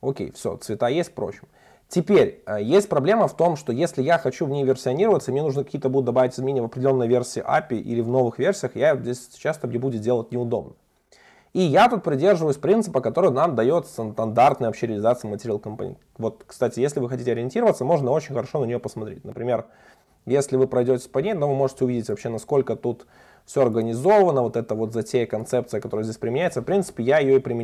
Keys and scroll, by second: 17.1 super+b, 22.2 super+b, 27.1 alt+super+[.